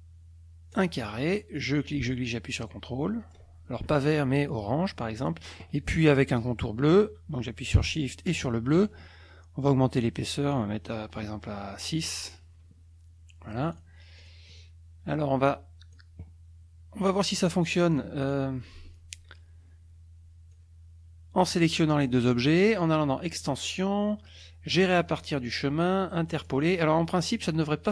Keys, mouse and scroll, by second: 0.7 click, 1.8-3.5 ctrl+drag, 5.2 click, 8.4 shift+click, 10.2 right click, 11.8 click, 13.7 click, 14.2 click, 14.6-16.1 drag, 17.9-18.5 drag, 20.5-21.6 drag, 23.4 click, 26.4 click, 27.3-27.9 drag.